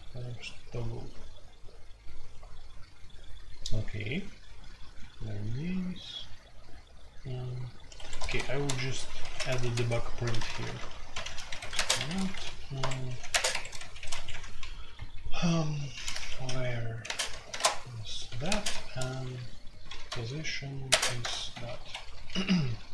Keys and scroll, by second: 7.9 Escape, 8.2-18.5 typing, 8.5 Return, 12.2 Escape, 13.5 Escape, 19.8-22.9 typing.